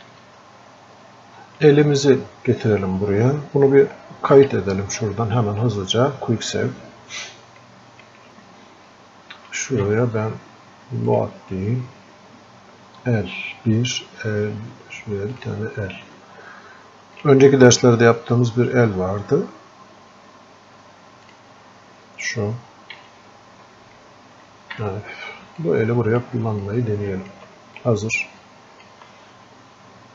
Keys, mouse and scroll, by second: 17.5 click, 24.8 f, 25.9-30.1 drag.